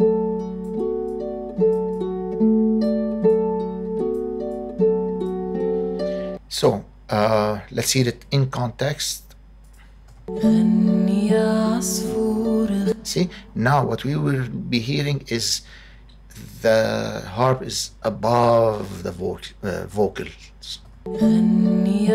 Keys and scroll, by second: 6.2 space, 10.0 space, 12.7 space, 20.8 space.